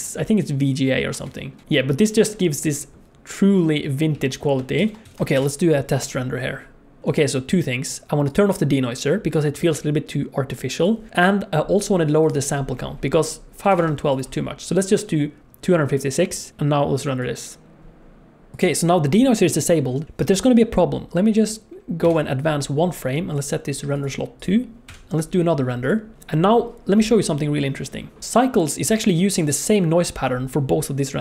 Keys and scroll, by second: 4.2 z, 5.2 ctrl+s, 5.9 F12, 16.5 F12.